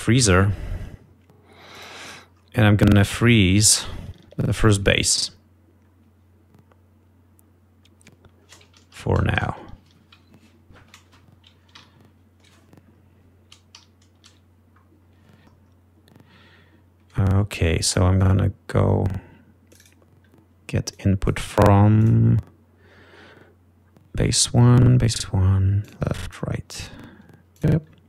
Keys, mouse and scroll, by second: 0.0-0.7 typing, 0.8 Return, 6.9-7.2 scroll up 2, 7.7-8.3 scroll down 4, 8.3-8.9 scroll up 2, 9.7 ctrl+Up, 10.5 ctrl+Down, 12.1 ctrl+Up, 13.1 ctrl+scroll up 3, 13.5 scroll down 2, 14.0 ctrl+Up, 15.0 ctrl+scroll up 3, 15.9 ctrl+Down, 16.5 ctrl+scroll down 3, 18.8 click, 20.6 click, 21.7 click, 22.8 click, 28.0 click.